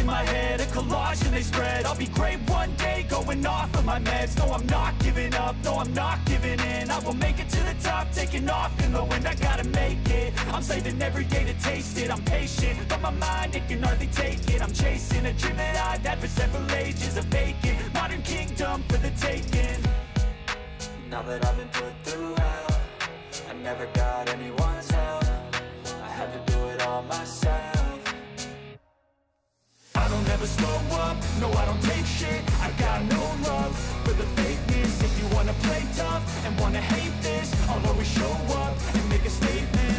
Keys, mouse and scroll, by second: 6.3 click, 8.5 click, 9.7 click, 11.0 click, 13.5 click, 14.3 click, 16.9 click, 18.4 click, 21.6 ctrl+i, 24.4 click, 25.4 click, 26.7 click, 28.9 click, 29.9 click, 31.6 click, 36.3 click, 37.5 click, 38.8 click, 39.5 click.